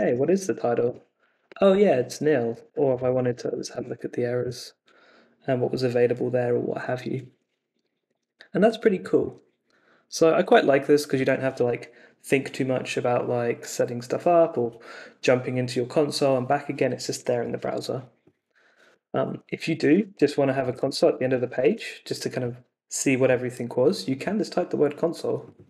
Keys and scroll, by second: 0.0-0.8 typing, 0.8 Return, 2.2-4.2 typing, 4.4 Return, 19.1-21.6 typing, 19.3 Up, 21.6 super+s.